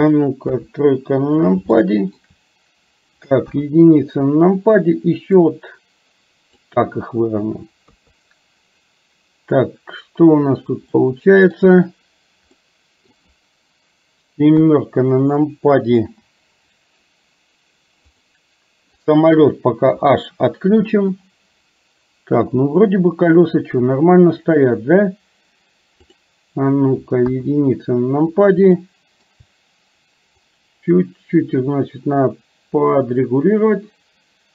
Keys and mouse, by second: 0.7 KP_3, 1.9 middle click, 5.6-6.8 drag, 7.9 KP_3, 11.0 middle click, 12.7 middle click, 14.6 KP_3, 16.0 KP_7, 18.2 click, 19.9 h, 26.1 click, 27.3 KP_1, 28.9 shift+middle click, 30.6 click, 31.0-34.5 drag.